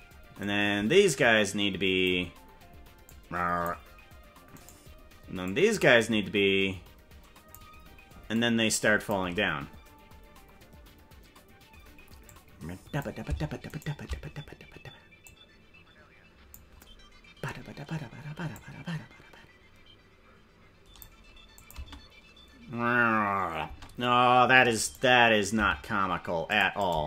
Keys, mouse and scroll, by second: 0.4-2.1 drag, 3.0 click, 4.7 right click, 5.4-7.6 drag, 8.3 click, 12.3 click, 13.7 shift+right click, 15.2-16.6 drag, 18.5-21.1 drag, 21.6 click, 21.7 space, 23.7 space, 24.9 right click, 25.5 g, 26.8-27.0 drag, 26.9 space.